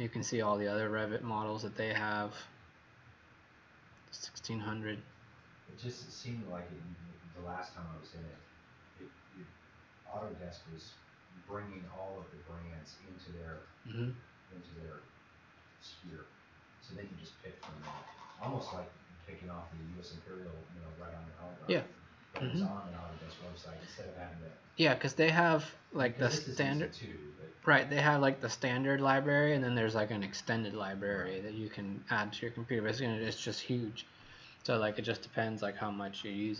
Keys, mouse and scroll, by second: 0.0 scroll down 1, 6.1 scroll up 1, 26.4 click.